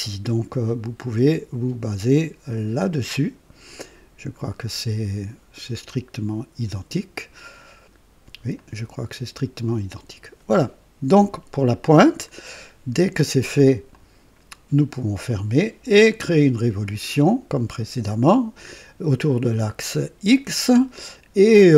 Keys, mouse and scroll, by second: 8.5 click, 13.8 click.